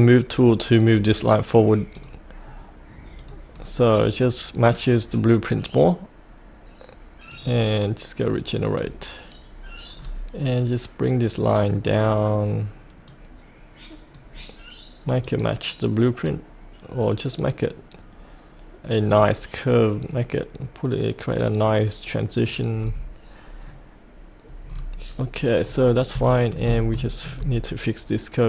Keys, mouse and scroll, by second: 2.4-3.2 scroll down 1, 3.2 click, 3.5-5.1 scroll down 1, 5.1-9.9 drag, 9.9-11.4 scroll down 1, 13.1-17.9 drag, 18.0-22.8 drag, 22.8-23.4 scroll up 1, 23.6-24.6 scroll down 1, 24.7-25.1 scroll up 1, 25.6 click, 26.2 shift+middle click, 26.7 scroll up 1, 27.1-28.2 shift+middle drag.